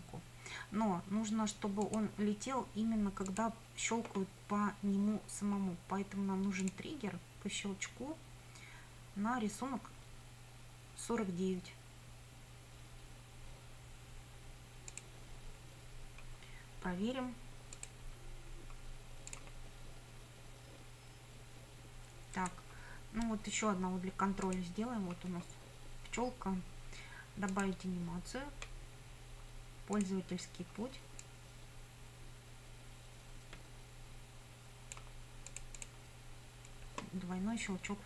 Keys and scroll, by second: 22.4 Escape.